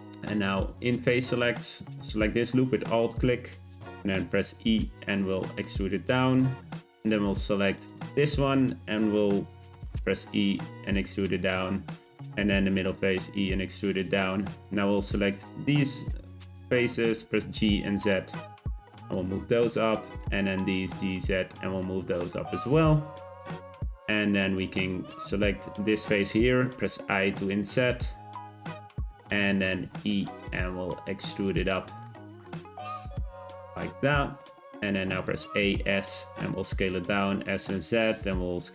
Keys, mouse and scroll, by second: 0.2 click, 0.4 click, 2.4-4.4 scroll up 1, 4.4 e, 6.9 g, 7.7 click, 8.0 click, 9.7 e, 12.0 click, 12.7 e, 15.0 click, 15.2 click, 17.3 g, 20.1 click, 20.3 click, 20.7 g, 23.1-25.2 middle drag, 25.2 click, 26.6 i, 28.9 middle click, 29.3-29.8 scroll down 2, 29.8 e, 31.6 shift+middle click, 32.4 g, 34.0 Tab, 34.7 Tab, 35.2 a, 35.5 s, 36.8 s.